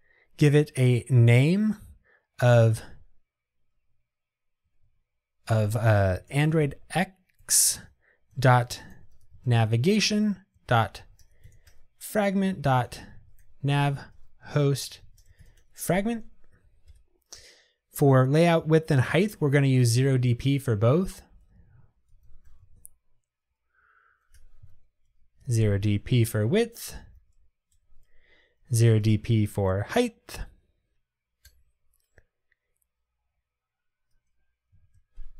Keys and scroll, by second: 24.5 Return.